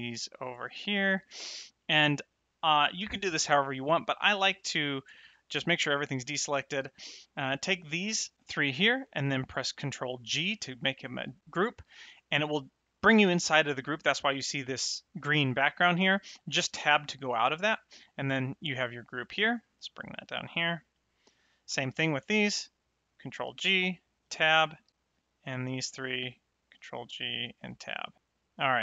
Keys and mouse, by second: 1.0 middle click, 4.0 click, 5.1 click, 10.2 ctrl+g, 16.8 Tab, 18.2 g, 21.0 click, 23.6 g, 24.2 Tab, 24.9 g, 26.7 ctrl+g, 27.4 g, 28.1 middle click, 28.1 click.